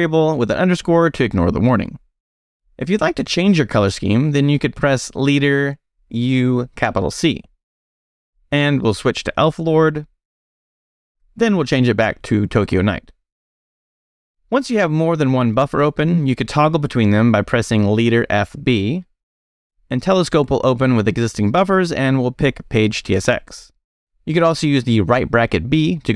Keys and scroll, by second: 0.2 Return, 5.9-12.3 typing, 12.8 Return, 16.2 space, 17.1 f, 18.5 b, 22.0 Return.